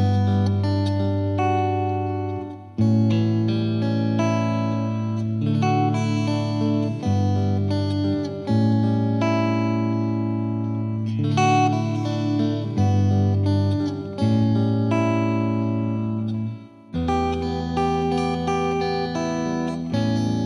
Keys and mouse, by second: 0.1 click, 0.2 click, 0.6 click, 2.0 click, 2.5 click, 3.2 Delete, 4.7 click, 5.3 click, 6.0 click, 6.1 click, 6.9 click, 8.6 click, 9.2 click, 10.7 click, 11.2 click, 11.7 click, 12.1 F3, 12.2 F2, 12.5 click, 13.4 click, 17.1 click, 17.3 click, 17.6 click, 18.3 click, 18.8 click, 19.3 click, 19.7 click.